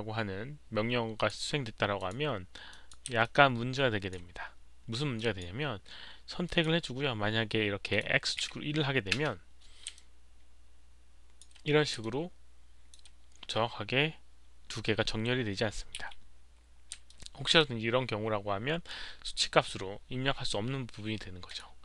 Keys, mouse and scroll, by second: 1.1 click, 1.9 click, 2.7 click, 3.2-4.1 alt+drag, 5.1 alt+drag, 6.4 click, 7.9 click, 9.1 Return, 9.1 alt+click, 9.1 1, 9.9-11.4 alt+drag, 12.0-12.9 alt+drag, 14.1 Return, 14.1 1, 16.3-17.8 typing, 17.0-17.5 alt+drag, 19.0 alt+click, 19.0 z, 21.4 alt+click, 21.4 z.